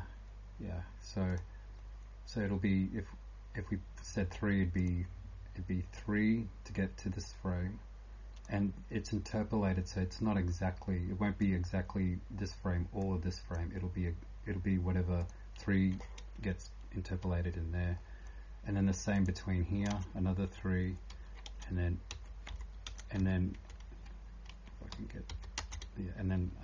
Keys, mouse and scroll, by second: 0.0-26.6 typing, 1.3 click, 16.4 Return, 19.1 click, 19.9 Return, 21.1 End, 21.5 Return, 22.1 Down, 22.5 Up, 23.2 Down, 25.3 Down, 25.6 Return, 25.7 Up.